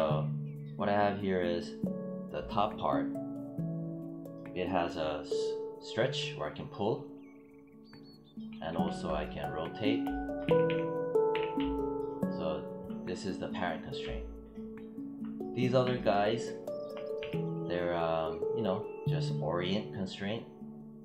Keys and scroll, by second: 8.4 e, 10.3 z, 18.0 e.